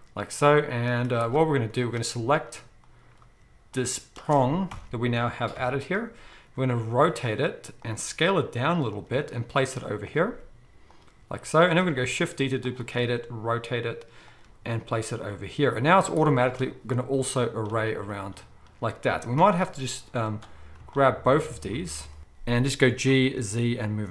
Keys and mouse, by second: 0.9 z, 1.8 click, 2.1 z, 3.7 shift+drag, 4.7 ctrl+l, 5.5-20.9 middle drag, 5.5 KP_7, 6.5 r, 8.0 s, 9.1 g, 10.3 s, 11.8 g, 12.0 shift+d, 13.0 r, 14.4 g, 15.9 z, 19.4 g, 20.9-24.1 shift+drag, 22.2 ctrl+z, 22.2 ctrl+l, 22.8 g.